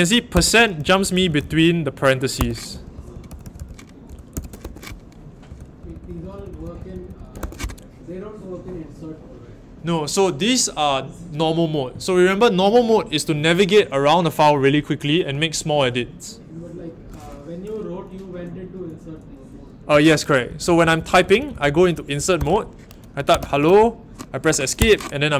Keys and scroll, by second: 0.3-7.8 typing, 19.9-24.1 typing, 24.7 Escape.